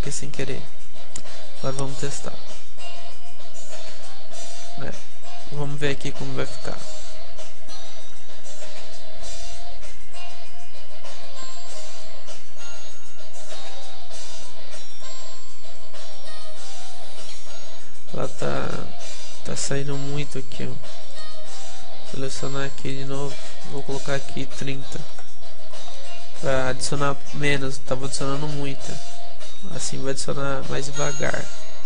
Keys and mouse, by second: 0.7-2.7 middle drag, 5.9-8.3 drag, 6.9-11.3 middle drag, 14.3-19.2 middle drag, 21.1-26.1 right drag, 21.9 z, 26.1-28.0 middle drag, 29.9 alt+z, 30.3 alt+z.